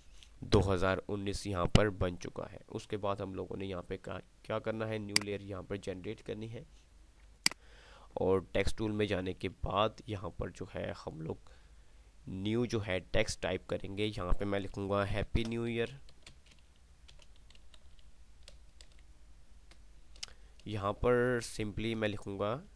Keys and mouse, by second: 4.1 click, 14.1 click, 15.6-18.8 typing.